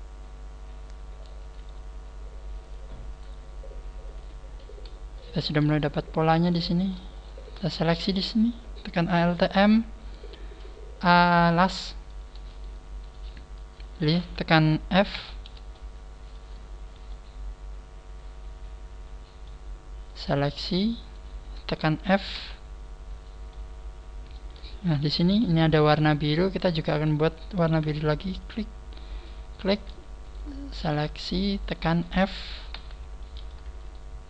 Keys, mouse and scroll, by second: 1.4 right click, 1.6 g, 2.7 click, 3.1 right click, 3.1 g, 4.6 scroll down 3, 5.2 shift+middle click, 5.8 scroll up 1, 6.3 scroll up 2, 6.7 right click, 7.1 shift+right click, 12.5 shift+right click, 15.1 f, 15.8 shift+middle click, 17.1 shift+middle click, 20.1 right click, 20.5 shift+right click, 21.0 shift+right click, 21.4 shift+right click, 22.3 f, 22.8 scroll up 3, 23.5 middle click, 24.7 scroll down 1, 25.2 KP_1, 27.7 ctrl+r, 29.9 scroll up 2, 30.3 right click, 30.7 shift+right click, 31.2 shift+right click, 31.6 shift+right click, 32.7 f, 33.2 middle click, 33.9 shift+right click.